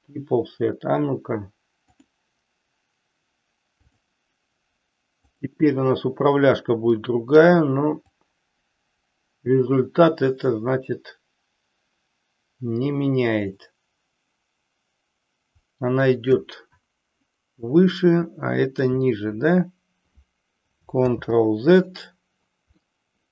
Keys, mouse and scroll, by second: 2.0-4.0 drag, 5.2 click, 7.0 middle click, 8.1-18.9 drag, 21.0 ctrl+z, 22.9-23.3 middle drag.